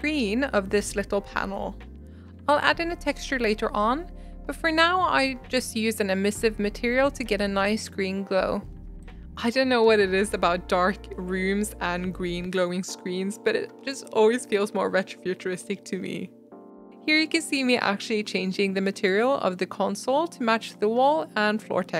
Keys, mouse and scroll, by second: 0.4 scroll down 1, 0.5 scroll up 1, 0.8 shift+click, 1.4 scroll down 3, 1.5 shift+middle drag, 1.8 scroll up 1, 1.8 shift+middle click, 1.9 scroll down 1, 2.2 scroll up 4, 2.4-2.7 shift+middle drag, 2.7 click, 3.1 click, 3.5 Tab, 3.7 click, 5.0 drag, 5.1 middle click, 6.0-7.1 drag, 7.1 Tab, 7.6 click, 9.4 click, 9.9 scroll down 6, 10.1 middle click, 10.2-10.7 scroll up 5, 11.0 click, 11.6 shift+a, 12.8 middle click, 13.5 click, 15.0-17.0 drag, 16.7 Tab, 17.0 shift+middle click, 17.1 scroll down 3, 17.5 scroll up 1, 17.8 Tab, 18.2 s, 18.8 g, 19.5 Tab, 19.7 Tab, 19.8 s, 21.0 g, 21.0 Tab, 21.1 scroll down 1, 21.2 middle click, 21.4 Tab, 21.9 s.